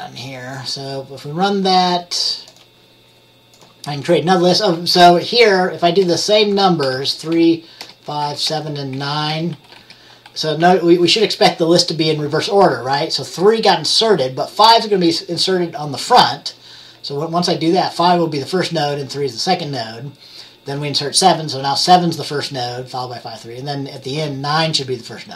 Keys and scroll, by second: 5.0 3, 6.9 Return, 7.4-10.7 typing, 7.9 Return, 8.6 Return.